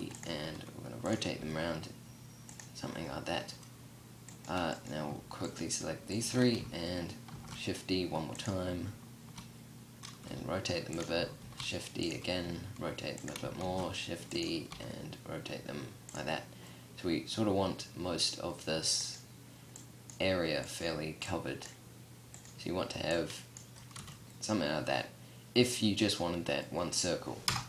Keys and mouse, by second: 0.8 g, 6.7 shift+d, 7.9-9.7 drag, 9.7 r, 10.4-10.8 drag, 10.8 shift+d, 11.8 r, 13.0 shift+d, 14.1 r, 23.3 a, 26.8 KP_0.